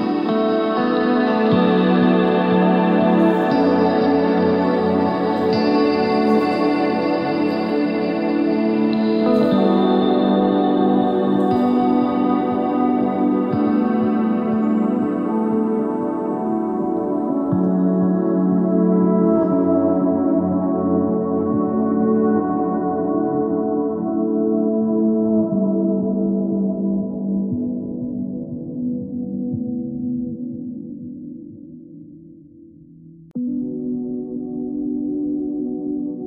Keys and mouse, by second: 0.3 z, 0.6 s, 3.2-4.4 middle drag, 3.8 ctrl+Tab, 6.3 middle click, 8.4-9.4 middle drag, 8.4 i, 11.4 s, 13.2 s, 16.5 s, 19.8 s, 22.2 Tab, 25.6 Tab, 28.3-29.9 middle drag, 30.5 s, 34.2-35.5 right drag, 35.9 KP_1.